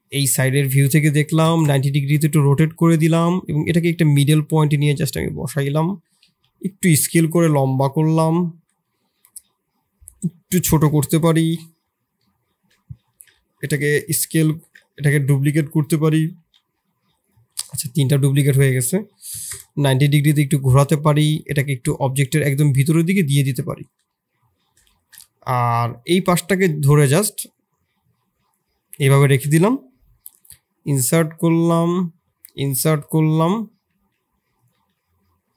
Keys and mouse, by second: 0.5 r, 2.1 s, 3.1 g, 5.1 click, 5.6 s, 7.6 KP_7, 8.4 shift+click, 8.8-9.6 middle drag, 10.1 s, 11.3 KP_7, 12.2 shift+click, 13.1 shift+d, 16.3 g, 17.7 Delete, 17.9 drag, 18.4 r, 20.7-24.1 drag, 24.1 middle click, 24.9 shift+click, 25.1 middle click, 25.6 Tab, 26.1 3, 29.2 shift+click, 32.1 i, 33.9 s, 34.7 e.